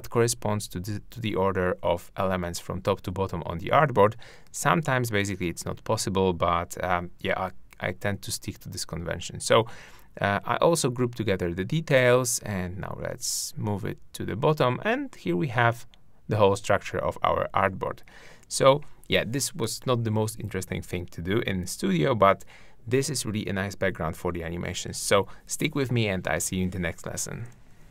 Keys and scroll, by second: 3.9 super+g.